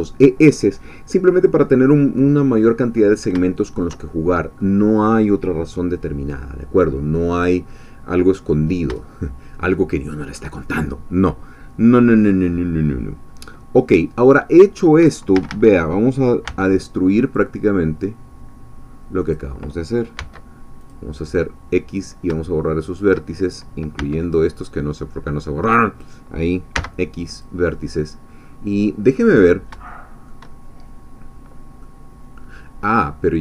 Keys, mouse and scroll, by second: 2.6 middle click, 3.5-4.7 shift+middle drag, 8.2 scroll up 2, 9.0-10.9 shift+middle drag, 13.3-14.3 scroll down 2, 14.3-15.3 middle drag, 15.3 a, 16.5 b, 17.3-19.5 drag, 20.2 x, 20.8-22.3 drag, 24.0 b, 24.3-26.2 drag, 26.7 x, 27.3 click, 28.0-29.7 middle drag, 29.9-30.9 shift+middle drag, 31.8-33.4 middle drag.